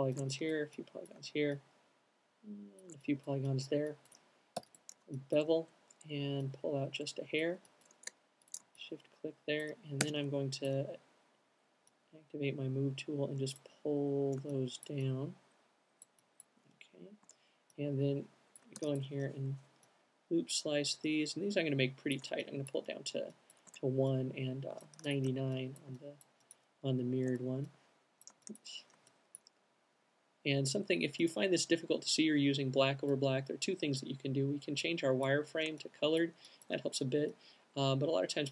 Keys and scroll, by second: 4.2 alt+shift+b, 10.1 alt+shift+w, 15.8 q, 23.2 alt+q, 25.1 c, 27.3 q.